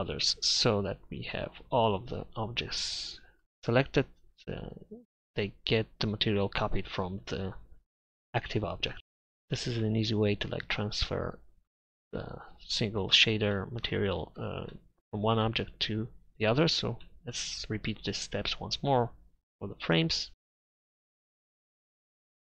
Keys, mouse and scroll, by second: 0.7 z, 10.1 middle drag, 20.4 KP_Divide, 21.6 middle drag, 22.0 z.